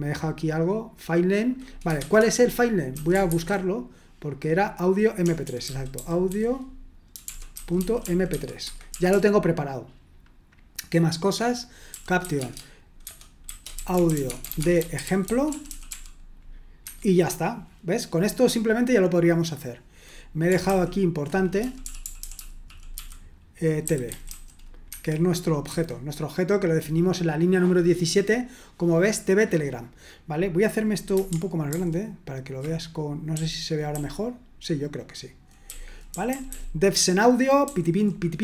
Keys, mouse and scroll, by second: 2.9-3.2 typing, 5.2-9.4 typing, 11.9-16.4 typing, 16.8 Escape, 21.3-24.7 typing, 24.9 Escape, 25.6 Escape, 31.7 ctrl+*, 33.3-36.2 typing, 37.6 j.